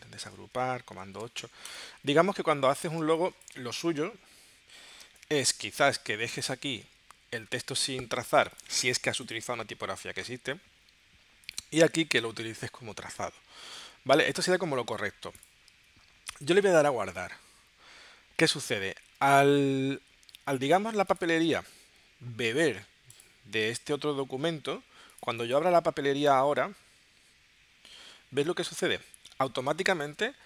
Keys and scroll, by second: 0.0 shift+super+g, 1.0 super+8, 3.1 space, 5.1 space, 16.3 super+s, 18.7 super+w, 19.2 super+Tab, 29.7 space.